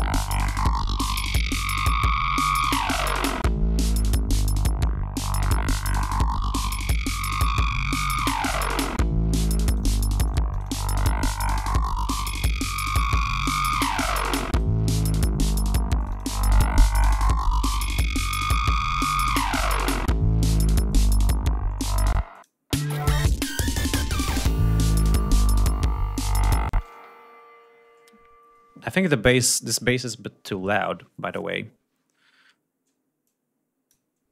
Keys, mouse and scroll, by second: 0.0 click, 0.9-3.2 drag, 3.2 scroll down 2, 3.6-5.8 drag, 5.8 scroll down 2, 6.2 click, 7.6 click, 9.0-10.5 drag, 10.8-12.7 drag, 12.7 scroll down 2, 13.0 click, 13.8 click, 15.6-18.5 drag, 20.5 click, 21.0 ctrl+scroll down 2, 31.6 scroll down 2, 32.9 click.